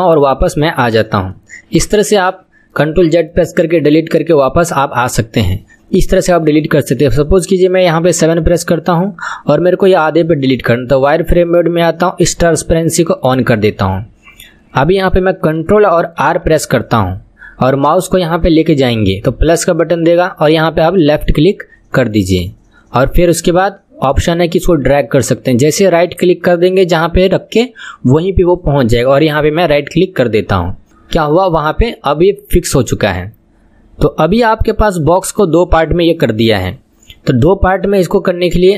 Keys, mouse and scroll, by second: 0.2 middle click, 0.9 click, 1.3-2.4 middle drag, 2.4-2.8 scroll down 2, 2.8-3.5 middle drag, 3.5-3.9 scroll up 5, 3.9 scroll down 1, 4.2-5.6 middle drag, 5.6 scroll up 1, 5.7-8.3 middle drag, 8.3 KP_7, 10.4 click, 13.2-16.2 drag, 16.2 ctrl+r, 33.2-38.7 middle drag.